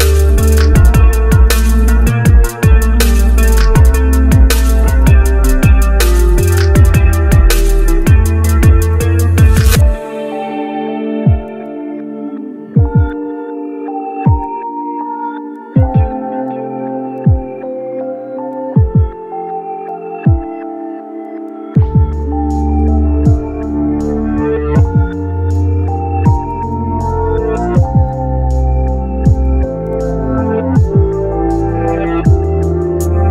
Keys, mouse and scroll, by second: 2.6 typing, 7.5 scroll down 1, 12.8-13.1 scroll up 1, 16.1 scroll up 1, 22.3 ctrl+right click, 22.8-23.3 ctrl+scroll down 1, 25.3-28.2 scroll down 1, 29.0 Delete, 29.5 scroll up 1, 32.1 scroll down 1, 32.4 scroll up 1.